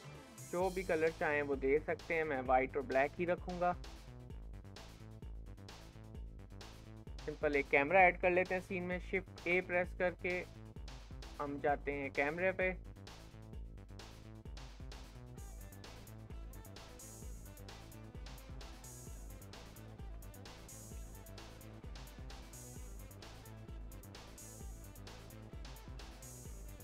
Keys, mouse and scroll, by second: 3.0-6.7 middle drag, 6.7 scroll down 1, 9.3 shift+a, 13.1-14.4 middle drag, 14.4 g, 19.0-20.0 shift+middle drag, 20.0 r, 22.7 g, 24.3 KP_0, 25.0-26.8 scroll down 1.